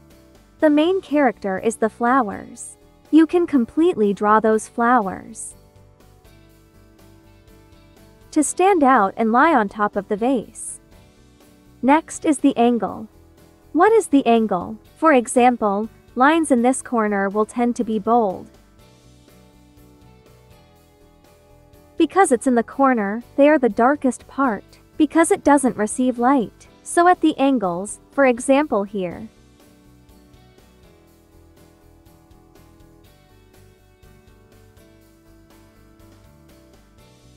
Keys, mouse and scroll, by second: 3.0 ctrl+z, 3.1 ctrl+click, 5.9 click, 11.5 space, 12.0 click, 17.7 click, 28.9 space, 29.0 click, 29.5 space, 30.0 space, 30.5 click, 34.1 ctrl+z, 34.2 ctrl+click, 34.6 ctrl+z, 34.7 ctrl+click.